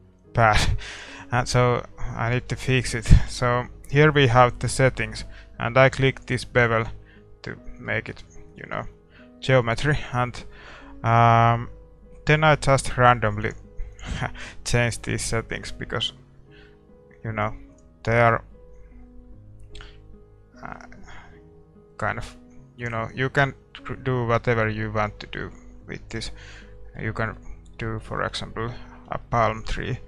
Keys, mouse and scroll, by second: 2.0-6.2 middle drag, 6.2-8.0 drag, 6.8-13.6 middle drag, 13.6-22.5 drag, 26.5-30.0 middle drag.